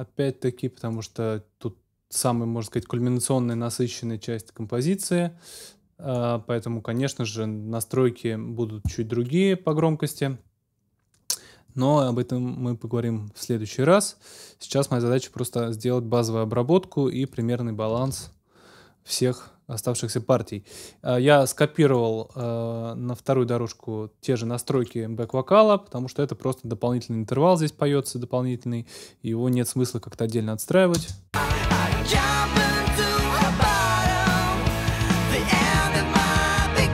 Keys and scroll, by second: 18.1 super+s, 30.9 space.